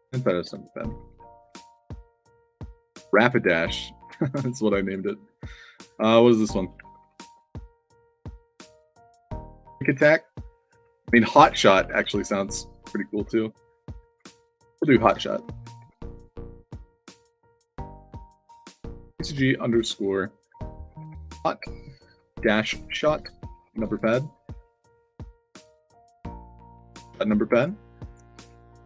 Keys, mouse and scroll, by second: 0.6-2.4 typing, 1.5 click, 4.7 click, 6.0 click, 14.9-16.2 typing, 16.9 click, 18.2 click, 19.0 shift+c, 21.0 o, 22.5 shift+s, 23.0 o, 23.3 space, 23.7 shift+p, 24.1 ctrl+a, 24.4 ctrl+c, 25.4 click, 26.0 click, 26.2 ctrl+v, 27.5 click, 28.0 click, 28.4 ctrl+v.